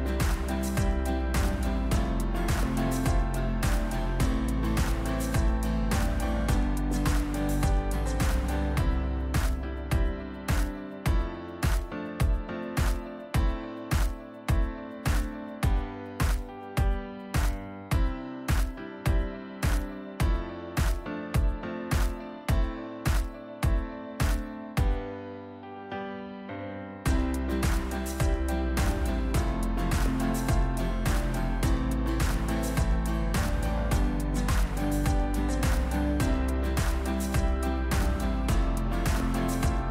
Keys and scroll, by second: 1.6 e, 7.6 shift+z, 9.4 Tab, 17.7 ctrl+shift+KP_Add, 20.8 ctrl+KP_Add, 21.2 Delete, 22.3 Delete, 24.1 Delete, 29.7 Tab, 34.2 Tab, 36.0 shift+d, 37.8 p, 38.6 Tab, 39.4 Tab.